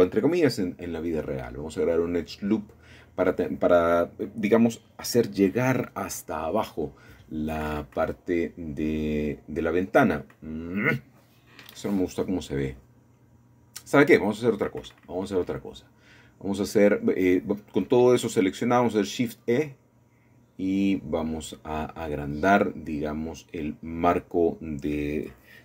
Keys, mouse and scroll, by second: 1.4-2.5 drag, 3.9-6.6 drag, 8.5-9.8 drag, 9.8 shift+middle click, 10.2 scroll down 1, 10.3-12.1 scroll up 4, 12.1-13.1 shift+middle drag, 13.2-16.3 scroll down 2, 14.0-17.2 middle drag, 16.3-17.2 scroll down 1, 23.9-25.6 shift+drag.